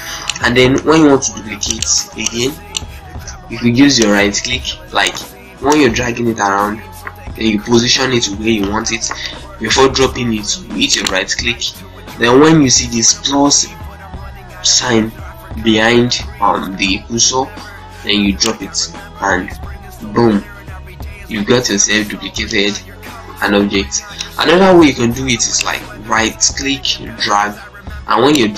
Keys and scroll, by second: 0.6 Delete, 1.7 z, 2.9 ctrl+space.